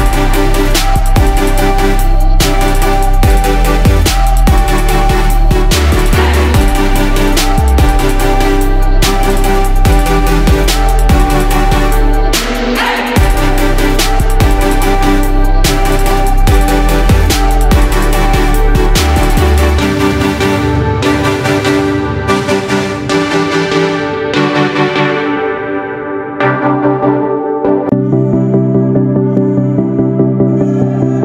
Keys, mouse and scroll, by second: 9.6-26.9 ctrl+drag, 27.5 Left, 28.2-28.6 typing, 29.1 click, 30.0-31.2 typing.